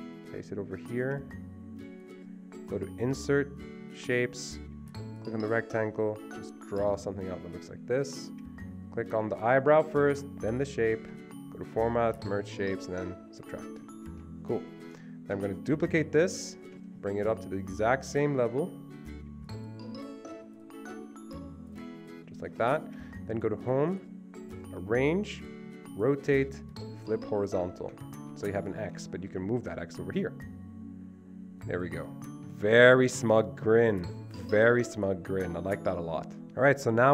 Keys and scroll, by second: 15.8 ctrl+d.